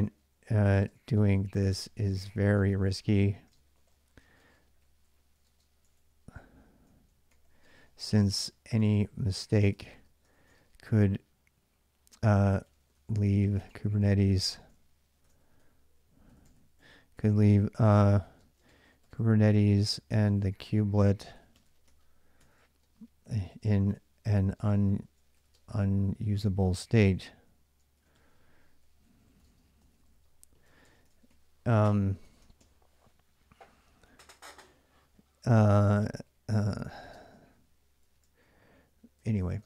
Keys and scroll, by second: 0.0-10.9 typing, 12.2-32.4 typing, 35.3-39.6 typing.